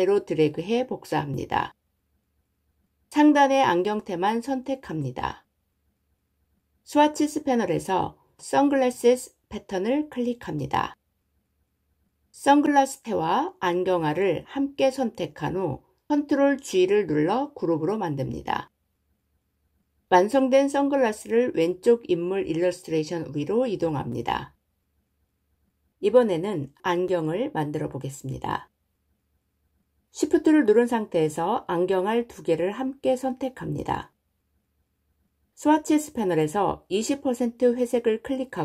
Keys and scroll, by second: 15.8 ctrl+g.